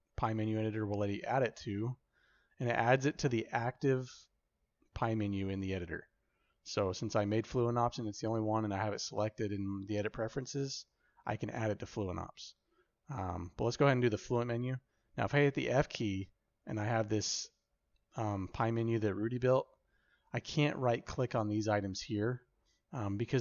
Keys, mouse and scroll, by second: 15.2 f.